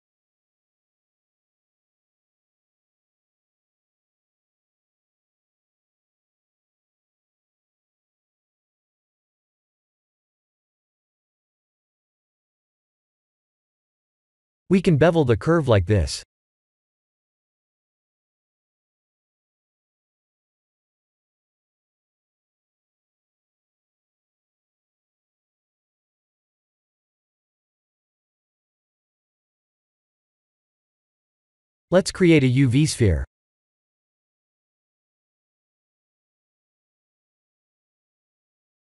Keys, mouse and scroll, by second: 1.3 click, 5.4 click, 7.0 shift+click, 11.8 Tab, 14.5 click, 15.8 click, 16.1 scroll down 7, 17.3 shift+click, 23.1-23.9 scroll down 5, 23.9 s, 26.0 middle click, 28.2 click, 28.7 middle click, 28.8 middle click, 31.2 click, 32.9 KP_1, 33.5 click, 33.8 shift+a, 38.4 g.